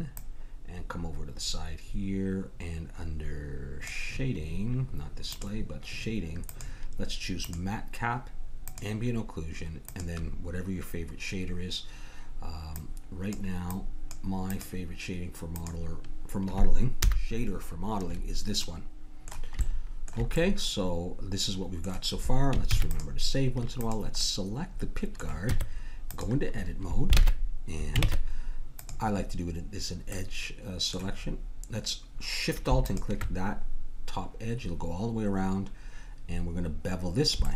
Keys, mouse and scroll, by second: 0.2-2.1 drag, 5.3-11.6 drag, 13.7-16.4 drag, 17.0 n, 18.6-19.7 middle drag, 20.8-21.8 middle drag, 22.7 ctrl+s, 23.8 click, 25.5 Tab, 28.0 ctrl+Tab, 30.1-32.5 middle drag, 32.8-34.7 drag, 36.3-37.5 middle drag.